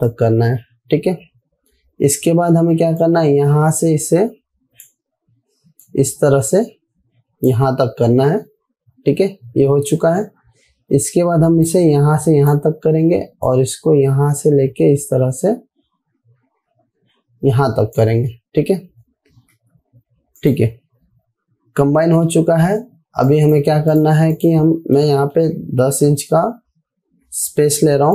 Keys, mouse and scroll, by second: 3.5-5.3 drag, 12.2-13.0 drag, 20.0 v, 20.8 click, 23.1-23.7 alt+scroll down 2, 23.7 click, 25.4 ctrl+k, 26.8-27.2 typing.